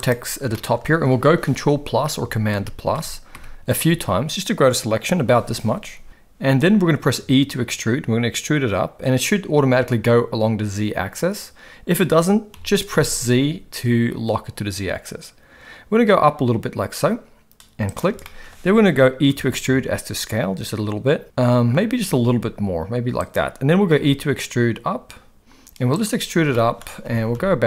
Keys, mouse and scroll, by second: 0.0 click, 0.5 shift+middle click, 2.5 ctrl+KP_Add, 7.2 e, 18.2 shift+middle click, 19.2 e, 21.2 ctrl+z, 21.2 middle click, 22.1 s, 23.9 e, 26.5 shift+middle click.